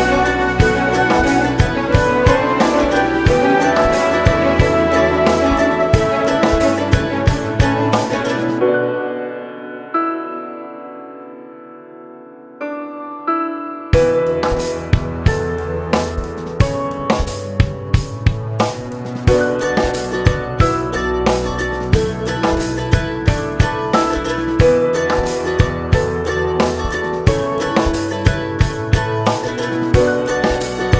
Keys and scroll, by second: 3.8 alt+z, 6.0 ctrl+1, 13.5 ctrl+r, 13.7 Escape, 24.4 ctrl+e, 26.1 ctrl+e.